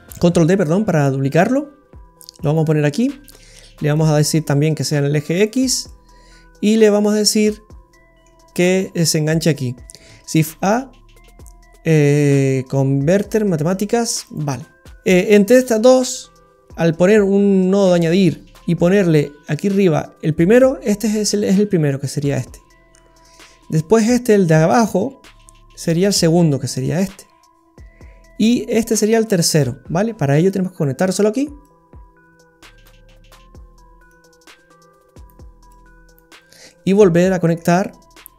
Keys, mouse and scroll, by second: 0.4 shift+d, 2.9-3.9 scroll up 4, 4.0 click, 5.8 middle click, 7.5 middle click, 10.1 shift+a, 14.9 scroll down 5, 18.3-19.8 scroll up 4, 30.5 click, 34.1 click, 35.7 click, 36.5 scroll down 2, 36.6 middle click, 37.8-38.1 scroll down 2.